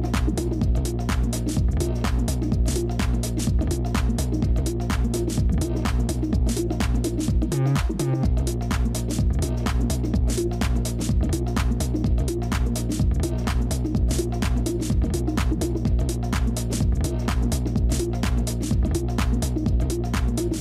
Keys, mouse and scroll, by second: 7.5-10.6 scroll up 1, 10.9 a, 12.4 scroll up 1, 13.7 a, 15.5 v, 18.8-20.4 scroll down 1.